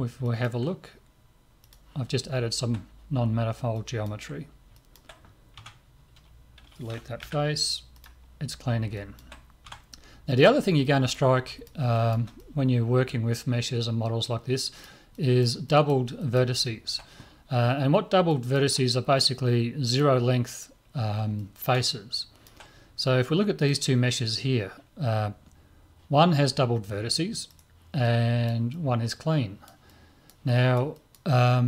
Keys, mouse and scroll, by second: 0.2-2.0 middle drag, 1.7-3.9 drag, 2.2-6.6 middle drag, 5.6 Tab, 7.2 Delete, 8.6-11.5 middle drag, 9.7 Tab, 14.2 middle click, 16.9-18.0 middle drag, 18.3-20.0 middle drag, 19.9-22.5 drag, 21.4-23.7 middle drag, 23.7 right click, 27.5 right click, 28.0-29.9 drag, 29.9-31.6 middle drag.